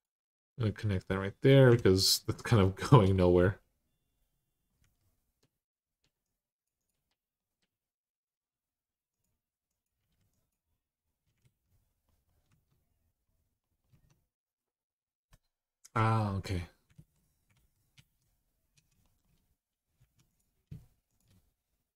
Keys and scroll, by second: 1.5 2, 4.6 x, 9.8 x, 11.2 alt+z, 12.3 Tab, 13.7 Tab, 16.7 ctrl+z, 17.3 ctrl+z, 17.7 ctrl+z, 19.8 1, 21.7-21.9 typing.